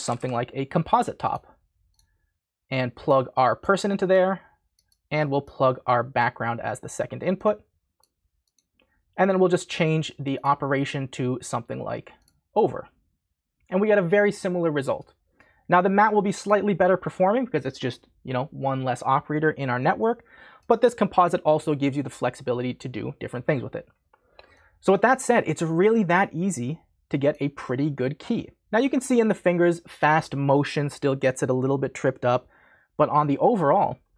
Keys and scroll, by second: 0.0-0.6 typing.